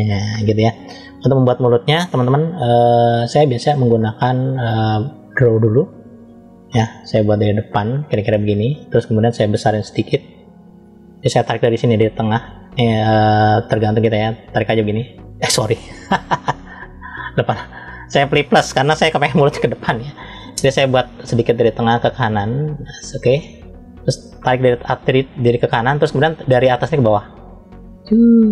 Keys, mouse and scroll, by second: 2.1-2.7 scroll down 1, 2.9 shift+middle click, 3.7 middle click, 5.1 click, 6.0 scroll down 1, 6.6-7.7 middle drag, 9.8 f, 14.0 click, 16.6 click, 17.9 click, 21.7 click, 27.5 click.